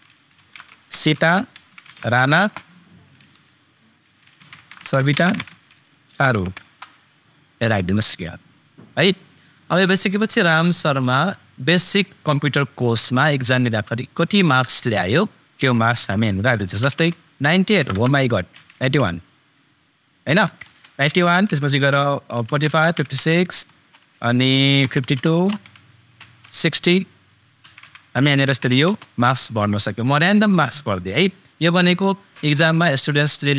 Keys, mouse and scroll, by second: 0.2 shift+super+s, 0.4 shift+super+i, 0.5 super+t, 0.9 super+a, 1.1 super+space, 1.5 shift+super+r, 1.7 super+a, 2.3 super+Return, 4.0 shift+super+s, 4.4 super+8, 4.5 super+i, 4.8 super+a, 4.9 super+space, 5.2 shift+super+t, 5.5 super+a, 6.1 super+r, 6.4 u, 6.6 super+Return, 10.6 super+click, 17.7 super+BackSpace, 22.6 super+Return, 27.6 super+Up.